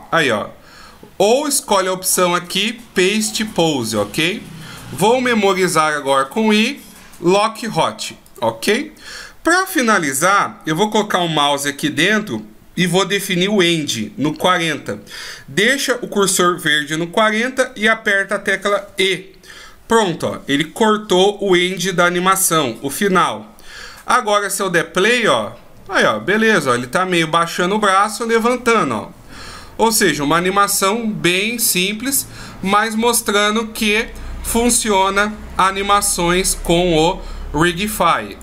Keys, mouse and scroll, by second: 3.5 click, 5.7 i, 18.5 e, 23.9 click, 37.9 click.